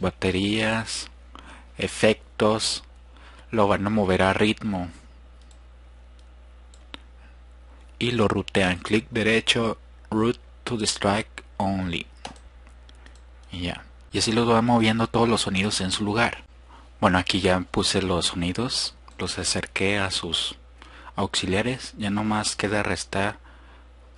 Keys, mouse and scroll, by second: 6.8 drag, 9.0-12.4 drag, 12.6 drag, 16.6-19.2 drag.